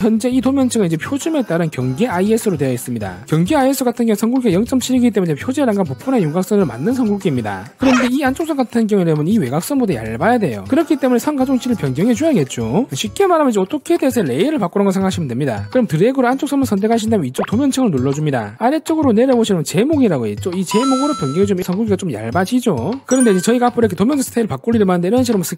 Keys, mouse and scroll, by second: 8.6 click, 16.4 click, 18.4 click, 18.9 scroll down 1, 21.6 click.